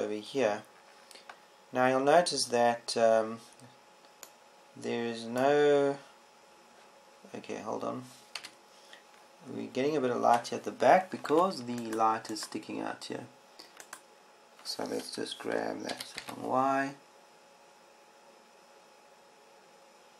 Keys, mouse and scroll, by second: 0.5 KP_0, 7.5 middle click, 10.0 KP_7, 12.9 Tab, 17.5 g.